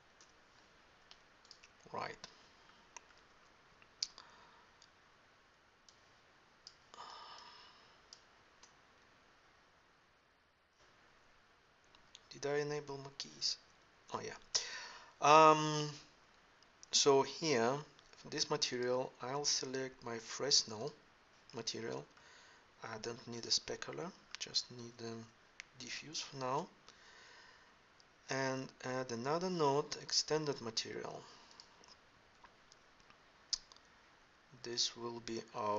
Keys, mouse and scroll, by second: 29.3 shift+a.